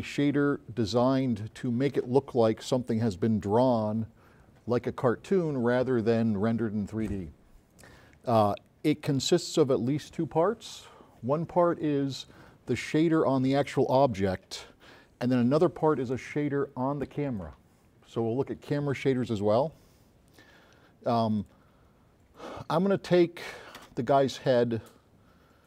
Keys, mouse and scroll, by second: 24.1 space, 24.5 click.